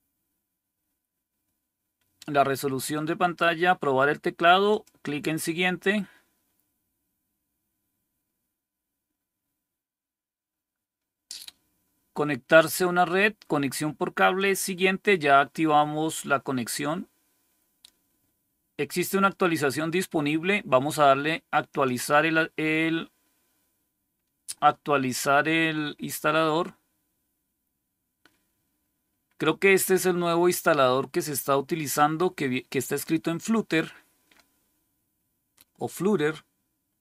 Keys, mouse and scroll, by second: 4.6 click, 14.2 click, 21.6 click.